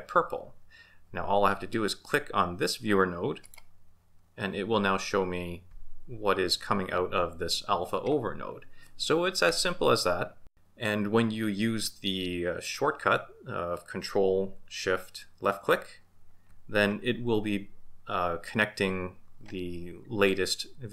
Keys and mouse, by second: 3.4 click.